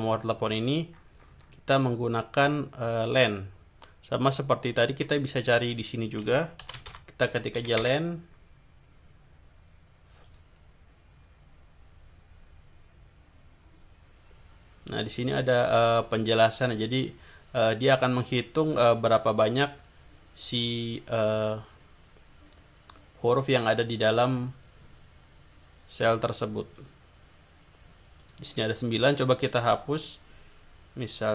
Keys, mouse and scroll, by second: 0.2-0.8 scroll down 2, 0.9-1.6 scroll up 2, 3.1 click, 4.8 click, 5.6 click, 6.4-7.4 typing, 7.8 Return, 10.2 click, 14.5-14.8 scroll down 2, 15.0-15.6 scroll down 4, 16.0 scroll down 2, 26.8 click, 28.2 click, 28.9 click.